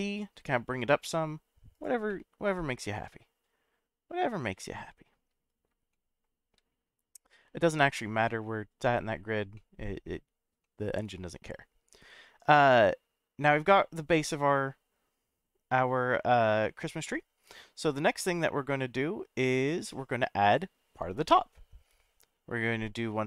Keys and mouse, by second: 1.7 click, 2.1-5.0 middle drag, 5.9-6.5 shift+middle drag, 7.2 click, 8.2-8.8 middle drag, 9.5-10.0 middle drag, 10.6-11.0 shift+middle drag, 20.4 click.